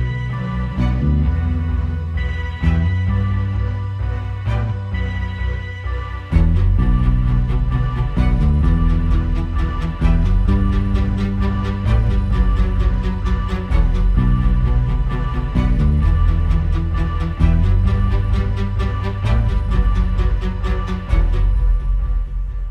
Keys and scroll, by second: 3.4 super+[, 5.4 space, 6.1 super+space, 10.4 super+], 13.3 space, 13.5 space, 19.4 super+z.